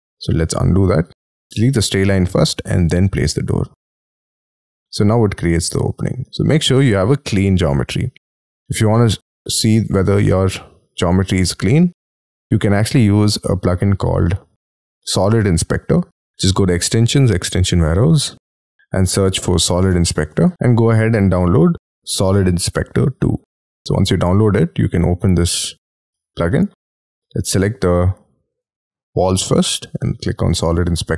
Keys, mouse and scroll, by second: 0.3 space, 0.7 ctrl+z, 1.1 ctrl+z, 1.7 e, 2.8 scroll down 1, 5.3 middle click, 7.0 ctrl+z, 7.3-7.8 scroll down 11, 7.9 middle click, 9.1 middle click, 9.6 middle click, 10.4 middle click, 10.9 shift+middle click, 12.1 scroll down 7, 12.4 space, 17.9 double click, 18.4 Return, 18.4 g, 19.8-20.9 typing, 26.2 middle click, 28.2 double click, 29.9 double click, 30.1 double click.